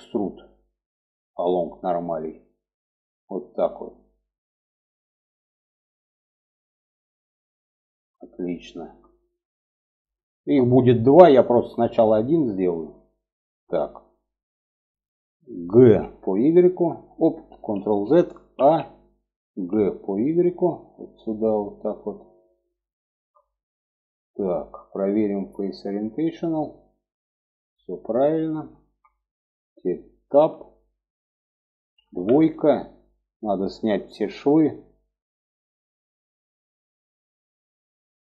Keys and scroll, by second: 15.2 g, 17.1 ctrl+z, 17.9 a, 18.9 g, 31.3 2.